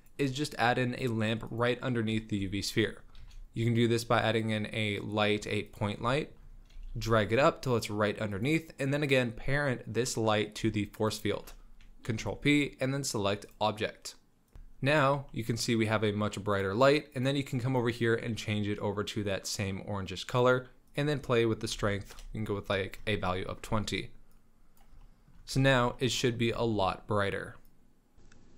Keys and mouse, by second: 0.0 z, 2.2 shift+drag, 2.2 shift+middle drag, 2.6 drag, 3.2 shift+a, 6.7 g, 12.1 ctrl+p, 14.5 click, 14.5 z, 15.3 middle drag, 16.6 drag, 17.1 click, 21.0-22.2 drag, 23.3 shift+drag, 23.5 shift+middle drag, 24.3 middle drag, 25.0-25.4 shift+middle drag, 25.5 z, 25.9 click, 26.5 shift+middle click, 27.7 click.